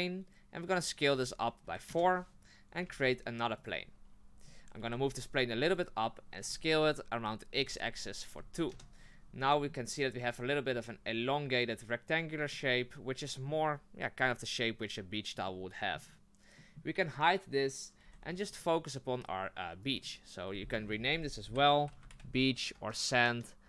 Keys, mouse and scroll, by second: 1.1 s, 2.8 shift+a, 4.4 scroll up 2, 4.8 g, 6.4 s, 9.4-12.4 middle drag, 12.5-18.0 middle drag, 18.0 h, 18.5 right click, 19.8 click, 19.9-23.0 drag.